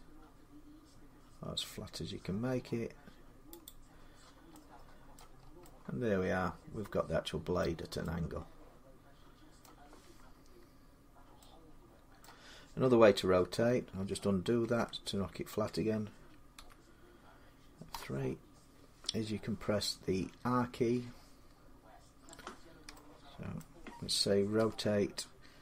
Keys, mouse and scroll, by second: 3.5 click, 3.9 scroll down 3, 5.0 middle click, 5.1 scroll down 1, 5.2 scroll, 7.2-7.8 scroll down 8, 7.4 middle click, 9.1 scroll, 9.4 middle click, 12.0 middle click, 12.6 scroll up 3, 14.4 ctrl+z, 16.4 1, 17.7 3, 20.2 scroll up 1, 20.3-21.5 scroll, 23.4-24.4 shift+middle click, 24.4 r.